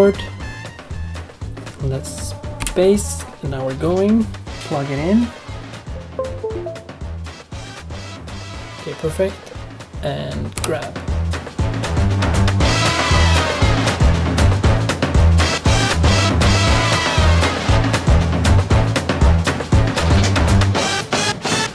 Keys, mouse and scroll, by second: 2.5 space.